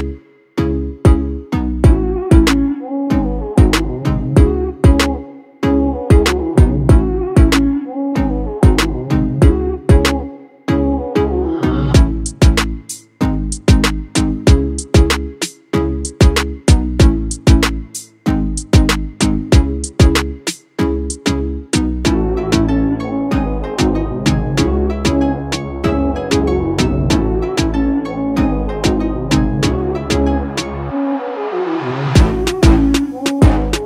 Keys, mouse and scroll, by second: 0.9-7.4 drag, 11.1-24.6 drag.